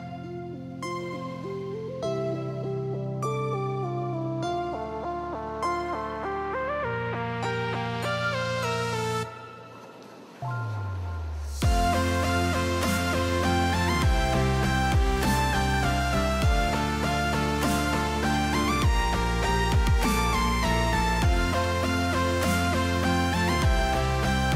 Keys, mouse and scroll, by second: 0.5 KP_0, 1.5 shift+middle click, 1.8 click, 2.0 Tab, 4.5-6.0 middle drag, 7.2 shift+middle click, 8.0 click, 10.0 KP_0, 10.8 middle click, 11.3 middle drag, 12.5-14.0 drag, 14.2-15.2 drag, 16.7-17.2 shift+middle drag, 18.2 middle drag, 18.9 shift+middle click, 19.5 middle drag, 19.9 shift+middle click, 20.5-23.1 drag.